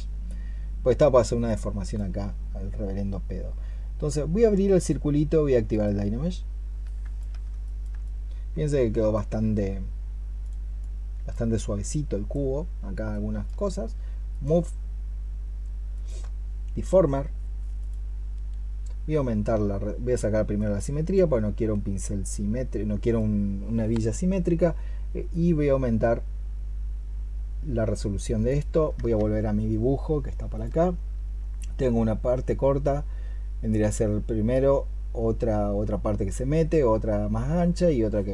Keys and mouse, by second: 7.5 alt+click, 7.9 alt+click, 10.6 double click, 28.9 alt+Tab, 30.4 alt+click.